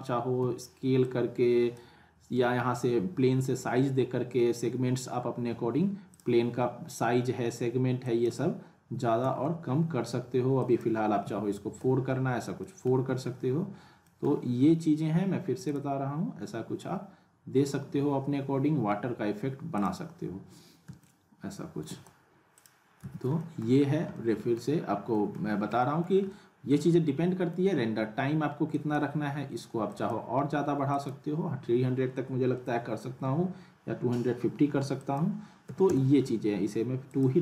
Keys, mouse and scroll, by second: 0.4 r, 1.0-1.9 drag, 2.4 ctrl+z, 5.5 w, 6.1 click, 10.6 click, 12.6 middle click, 12.9 w, 13.3-13.7 scroll up 1, 14.1 middle click, 15.7 click, 19.7 click, 20.8 space, 21.0-22.0 middle click, 21.4 space, 22.5 click, 23.0 z, 23.4 alt+middle click, 23.8 scroll up 1, 24.1-24.8 alt+middle click, 24.7 scroll down 1, 25.1 middle click, 25.5 scroll up 1, 25.8 middle click, 26.3-27.5 alt+middle drag, 28.7 click, 35.0 click.